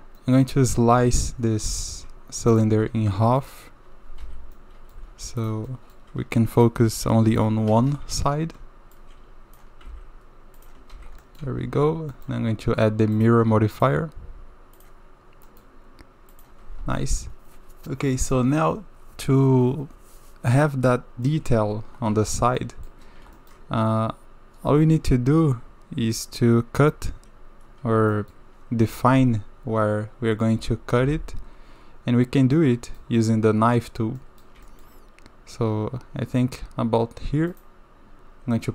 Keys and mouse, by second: 0.2 middle click, 0.9 KP_7, 1.7 shift+click, 2.5 click, 3.4 shift+click, 4.2 j, 4.5 click, 5.4 click, 5.7 click, 6.5 shift+click, 6.8 shift+r, 7.7 KP_1, 8.6 shift+z, 9.1 click, 10.5 x, 11.0 shift+z, 11.2 click, 11.4 Tab, 12.1 click, 15.5 click, 16.3 click, 17.0 click, 21.3 click, 21.7 Tab, 22.6 click, 23.4 shift+click, 26.8 KP_7, 28.1 shift+middle drag, 30.6 k, 32.5-34.9 drag, 34.9 middle click, 35.9-38.7 drag.